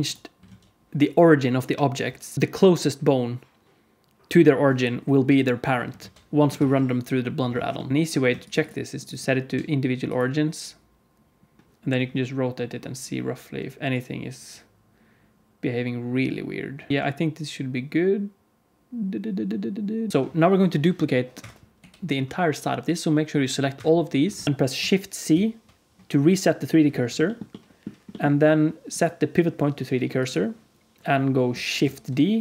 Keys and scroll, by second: 0.4 alt+z, 2.3 alt+a, 2.3 ctrl+s, 5.9 alt+z, 6.5 ctrl+s, 7.9 r, 7.9 a, 7.9 q, 9.2 r, 9.2 q, 11.8 r, 16.9 r, 20.1 g, 21.7 g, 25.2 shift+c, 31.9 shift+d.